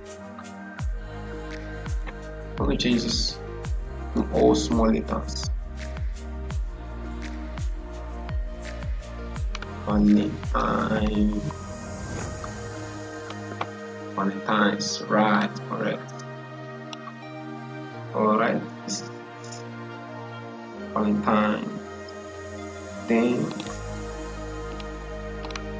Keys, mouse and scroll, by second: 1.3 click, 3.0 ctrl+a, 4.0 BackSpace, 6.3-13.1 typing, 15.2-23.4 drag.